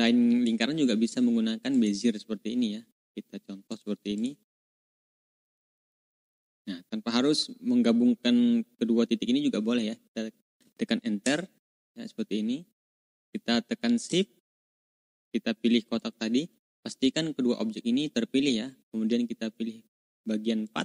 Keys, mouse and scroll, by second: 1.7 click, 3.6 click, 4.1 click, 4.4 click, 4.7 click, 5.1 click, 5.7 click, 11.1 Return, 13.1 click, 15.9 shift+click, 20.6 click.